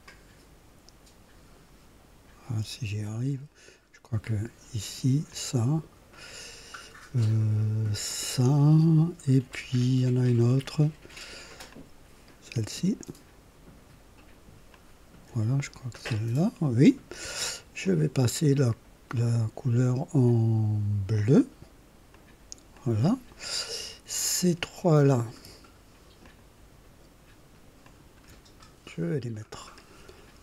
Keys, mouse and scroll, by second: 4.2 ctrl+click, 5.3 ctrl+click, 8.1 ctrl+click, 11.7 ctrl+click, 14.7 ctrl+click, 15.9-17.1 drag, 17.8 click, 19.1 click, 21.1 click, 22.1 click, 22.7 click, 24.1 click, 26.2 ctrl+click, 27.8 ctrl+click, 29.4 click.